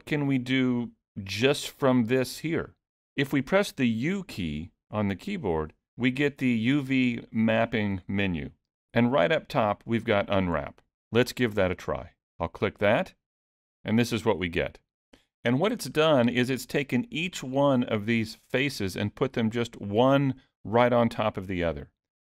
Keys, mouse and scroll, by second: 1.6 middle click, 5.3 u, 15.9-16.6 scroll down 4, 17.3 middle click, 19.4 middle click, 20.7-22.0 scroll up 1.